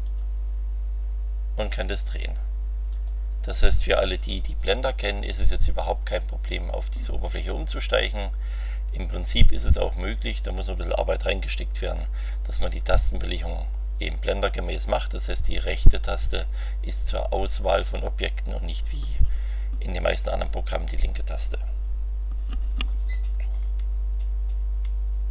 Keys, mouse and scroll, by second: 0.0 click, 2.9 click.